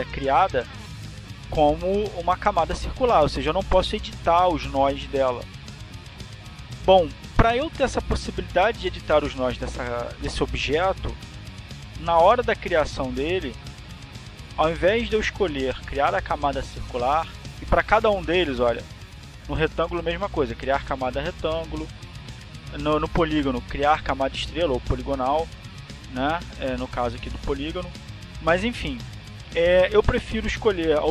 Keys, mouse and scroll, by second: 0.8 click, 1.6 click, 2.8 click, 15.1 click, 16.5 click, 20.2 click, 22.3 click, 25.2 click, 29.1 click.